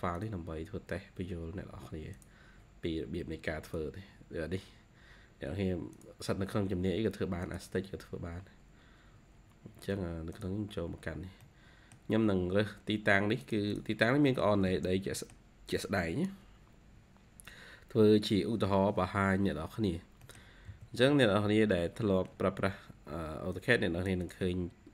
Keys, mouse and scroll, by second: 11.3 middle click, 11.8-12.3 scroll down 1, 12.3-13.6 scroll up 2, 13.6 double click, 13.9 scroll down 3, 14.1 scroll up 1, 14.2 middle click, 14.4 typing, 15.1 middle click, 16.5-17.2 scroll up 2, 19.7-20.1 scroll down 2, 20.1 middle click, 20.6-21.4 typing, 23.0 ctrl+q, 23.4 ctrl+click, 23.5-24.0 ctrl+q, 24.1 ctrl+click, 24.5 ctrl+q, 24.8 scroll up 1.